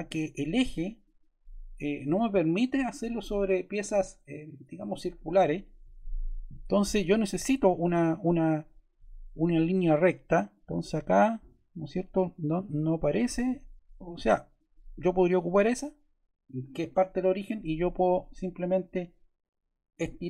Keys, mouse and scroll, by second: 2.2-3.4 drag, 6.4 click, 10.3-11.5 drag, 14.5-15.7 drag, 17.9-19.1 drag.